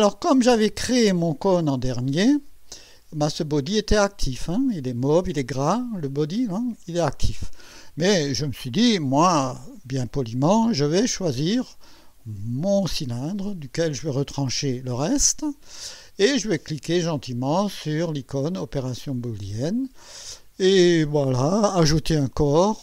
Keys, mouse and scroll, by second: 1.5 click, 2.4 right click, 3.0 click, 4.3 click, 12.7 click, 19.3 click, 22.7 click.